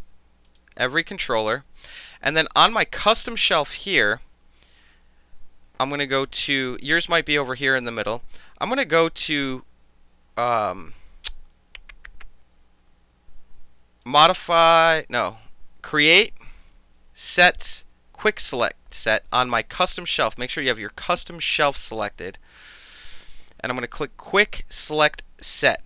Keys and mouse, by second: 0.5 shift+click, 3.1 click, 14.0 click.